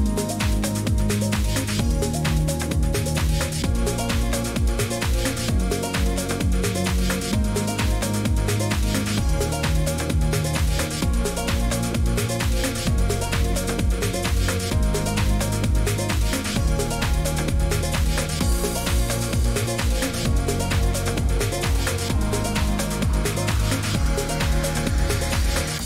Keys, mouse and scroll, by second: 0.0-25.8 typing, 4.3 click, 5.1 click, 6.4 click, 7.0 click, 9.3 click, 11.4 click, 12.9 click, 14.2 click, 15.9 click, 19.9 click, 21.4 click, 22.9 click, 24.5 click.